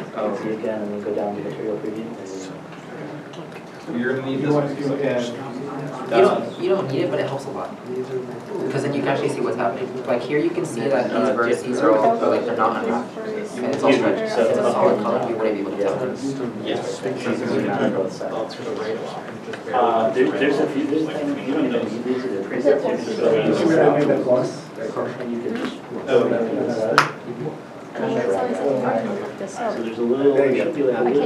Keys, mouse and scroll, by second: 12.0 z, 12.1 middle click, 12.3 scroll up 1.